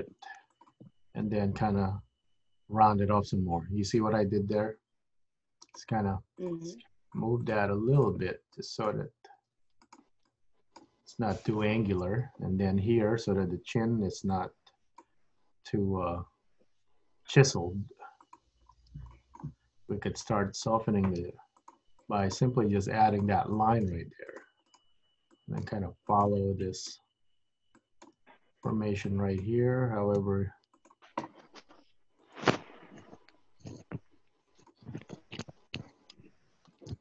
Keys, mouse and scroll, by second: 1.2 g, 6.4 click, 6.7 g, 7.6 click, 7.7 g, 8.6 click, 9.4 g, 10.4 click, 11.0 g, 14.4 click, 15.6 g, 18.8-19.1 scroll up 2, 19.2 shift+middle click, 20.4 click, 21.2 g, 22.1 click, 22.5 g, 23.7 click, 24.1 g, 24.8 click, 25.4 click, 26.3 g, 26.7 click, 27.1 g, 27.8 click, 28.2 g, 29.1 click, 30.2 r, 31.4 g, 33.1 click, 33.5 g, 34.5 click, 34.8 g, 35.7 click, 36.1 g, 36.8 click.